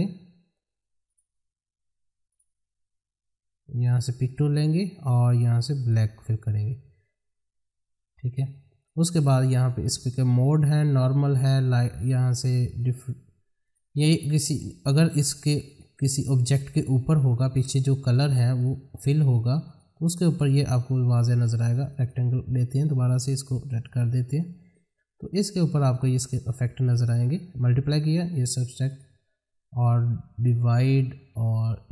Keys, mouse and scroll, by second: 8.8 click.